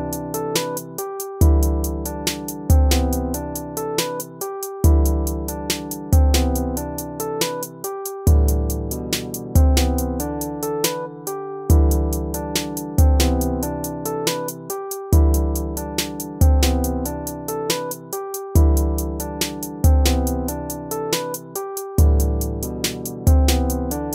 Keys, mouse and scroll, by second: 0.0-5.1 typing, 4.3 ctrl+z, 6.2 ctrl++, 6.6 BackSpace, 6.8 BackSpace, 7.5 ctrl+-, 8.2-10.9 typing, 12.0 BackSpace, 12.6 ctrl+-.